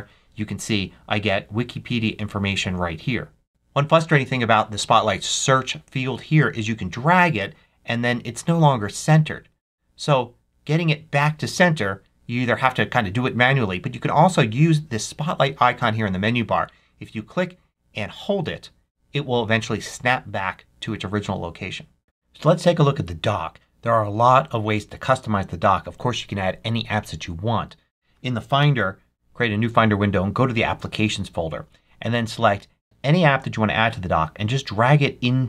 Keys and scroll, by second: 28.5 super+n.